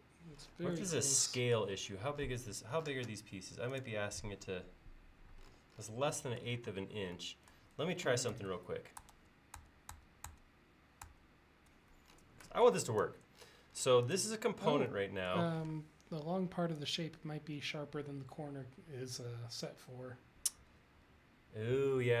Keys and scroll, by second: 2.6 l, 6.8 space, 8.4 super+z, 9.2 super+z, 11.1 super+z, 15.7 m.